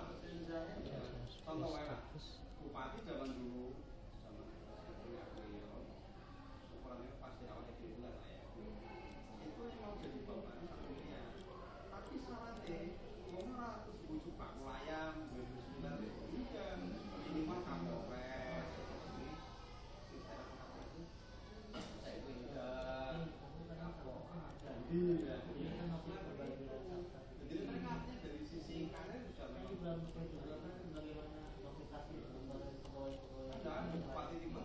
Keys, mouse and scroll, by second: 3.1 click, 9.3 click, 11.3-12.7 middle drag, 12.7-15.7 right drag, 15.1 g, 20.9 click, 24.7 click, 26.7 click, 29.8 middle click.